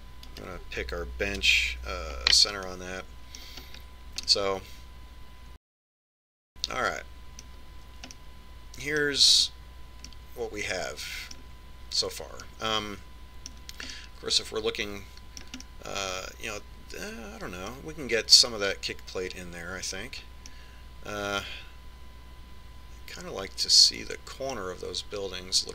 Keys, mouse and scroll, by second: 2.4 right click, 3.4 KP_Decimal, 4.7-8.0 middle drag, 9.1-12.9 middle drag, 13.5-18.5 middle drag, 21.6-23.5 middle drag.